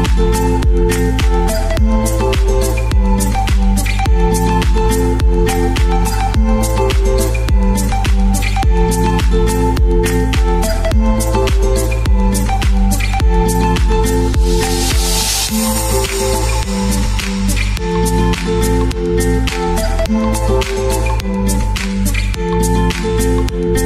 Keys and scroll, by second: 11.1-12.6 typing, 17.1 5, 17.5 5, 18.0 Return, 19.9 shift+Page_Down, 20.1 shift+Page_Down, 20.5 shift+Page_Down, 21.0 shift+Page_Up, 22.3 shift+Page_Up.